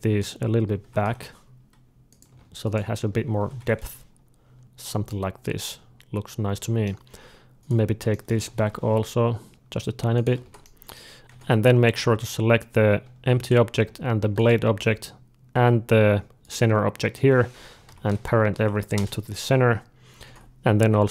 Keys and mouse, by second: 0.7 g, 2.3 alt+a, 2.4-4.5 drag, 3.2 g, 4.6 alt+a, 4.9-6.9 middle drag, 7.6 alt+a, 7.6-9.4 drag, 7.6 g, 8.2 g, 9.4 middle click, 10.3 alt+a, 10.5 middle click, 11.2-12.2 drag, 12.2-13.3 middle drag, 13.3-18.9 drag, 17.7 ctrl+p, 19.7-21.1 middle drag, 20.1 alt+a.